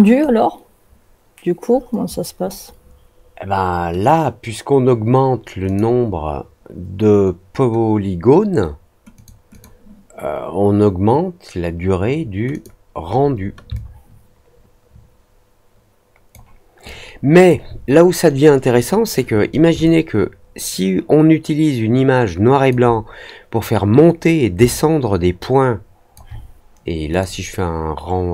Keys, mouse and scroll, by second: 5.6 click, 9.1 click, 9.4 click, 12.4 click, 13.7-16.2 alt+drag, 16.8 alt+click, 19.8-22.6 alt+drag, 24.6-26.1 alt+drag, 27.0 click.